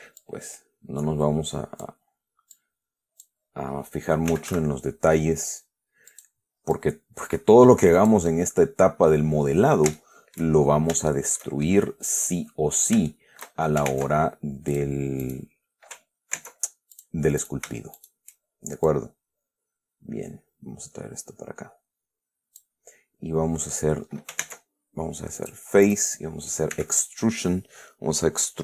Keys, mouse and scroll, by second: 0.5-2.3 drag, 2.3 middle click, 2.8 click, 3.7-5.1 middle drag, 4.4-5.3 typing, 6.4 click, 7.0-8.6 drag, 8.6-9.6 middle drag, 10.3 shift+middle click, 11.4 shift+middle click, 12.2-13.3 middle drag, 13.4 shift+middle click, 14.2 ctrl+shift+Tab, 15.0 click, 15.5 right click, 16.6 ctrl+Tab, 17.2 ctrl+click, 17.7 shift+right click, 18.3 shift+right click, 19.2-23.1 drag, 24.7 ctrl+Tab, 25.7 click, 26.1 right click, 27.0 e.